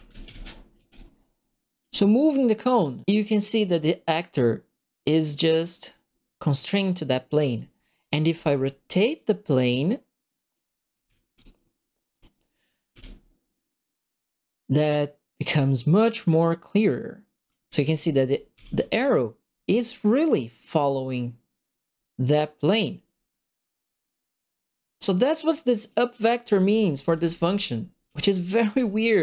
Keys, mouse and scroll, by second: 0.0-1.2 typing, 1.7 click, 3.0-6.9 drag, 6.7 right click, 6.9 right click, 8.0 click, 8.2 e, 9.1-10.5 drag, 10.7-11.7 typing, 10.8 right click, 12.1 click, 12.9 w, 14.7-17.4 drag, 17.6-18.7 typing, 17.7-19.1 right drag, 20.3-25.8 drag, 26.2-29.1 typing, 26.3-29.2 right drag.